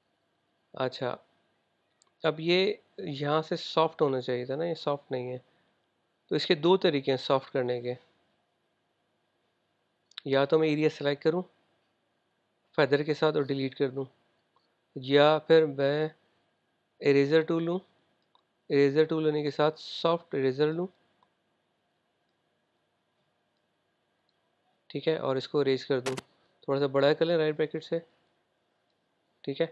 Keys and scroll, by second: 27.3 ], 27.4 ].